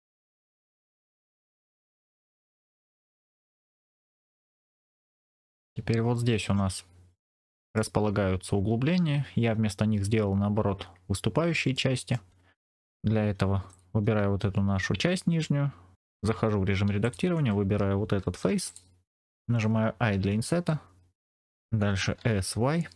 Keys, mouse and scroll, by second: 0.5 click, 0.7 middle click, 1.0 scroll down 2, 1.2 click, 1.4 middle click, 1.8 click, 1.9-2.2 scroll down 2, 2.5 shift+right click, 2.8-3.8 middle drag, 4.2-5.3 middle drag, 5.6 scroll down 2, 6.3 scroll down 1, 7.1 middle click, 11.6 middle click, 12.8 shift+middle click, 12.8 scroll up 1, 13.6 click, 16.2 Tab, 16.9 click, 18.4 3, 18.5 click, 20.0 i, 21.3 click, 21.9 s, 22.3 y.